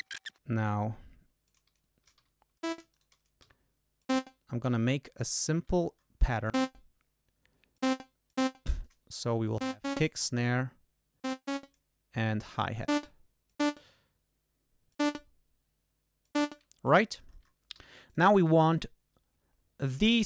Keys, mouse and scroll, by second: 0.0 shift+Tab, 0.3 shift+Return, 2.1 e, 2.5 shift+click, 2.8 shift+right click, 3.3 shift+d, 3.9 click, 5.0 ctrl+scroll up 2, 5.4 ctrl+scroll down 2, 6.4 click, 7.7 click, 8.2 click, 9.5 click, 11.1 click, 12.7 click, 13.4 click, 14.8 click, 16.1 click, 16.6 ctrl+scroll up 2, 17.7 g, 18.0 click.